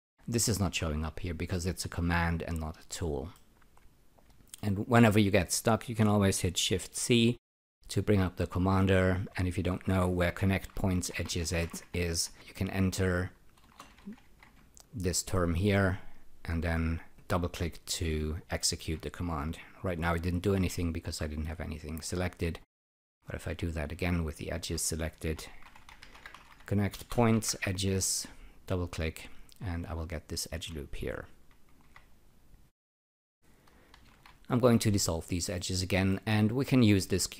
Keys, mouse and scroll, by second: 3.3 alt+middle click, 6.9 shift+c, 10.4-12.2 typing, 13.6-14.9 typing, 17.1 click, 17.3 double click, 20.3-21.0 typing, 21.2 click, 23.8 shift+c, 25.5-27.8 typing, 28.7 click, 28.8 double click, 31.8 e, 32.7 click, 32.9 double click, 34.1 shift+., 35.5 alt+middle click.